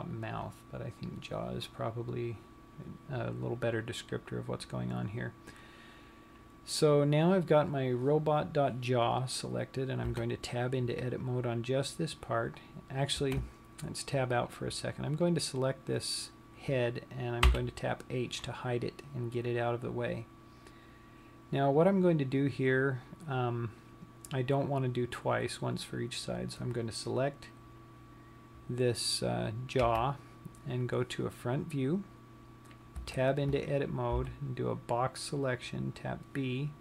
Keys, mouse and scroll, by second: 10.7 Tab, 12.1-13.3 scroll up 1, 13.3-14.0 scroll down 1, 14.0 Tab, 15.9 click, 18.1 h, 26.6 click, 30.3 KP_1, 33.5 Tab, 34.8 b.